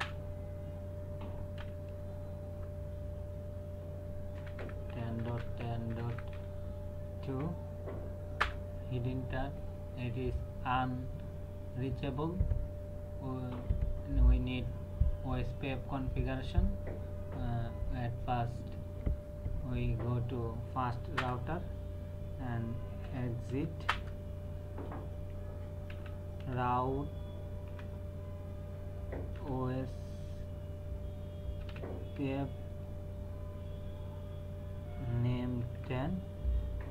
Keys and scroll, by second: 1.6 g, 2.6 space, 4.4-7.3 typing, 8.4 Return, 21.1 Return, 23.0-23.5 typing, 23.9 Return, 25.7-26.9 typing, 27.6 Tab, 29.3 o, 31.6 s, 32.2 Tab, 35.6 KP_1, 35.8 KP_0.